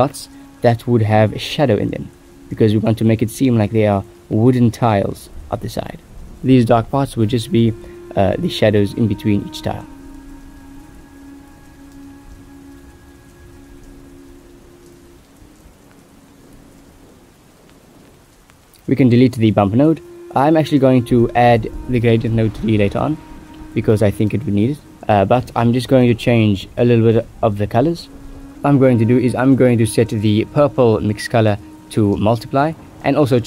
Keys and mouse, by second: 3.6 Tab, 4.0 a, 4.6 click, 5.0 Tab, 5.5 ctrl+s, 12.7 shift+middle drag, 13.2 shift+middle click, 13.6 click, 14.7 middle click, 15.1 a, 16.1 ctrl+c, 16.9 ctrl+s, 17.9 click, 18.8 a, 19.0 x, 19.9 ctrl+v, 20.4 drag, 21.4 drag, 22.8 click, 23.0 x, 23.8 click, 24.0 x, 24.4 middle click, 24.8-25.4 drag, 25.8 click, 25.8 x, 26.5 click, 26.5 x, 27.8 click, 27.8 x, 29.4-30.5 drag, 30.8 middle click, 31.4-31.9 right drag, 32.6 g.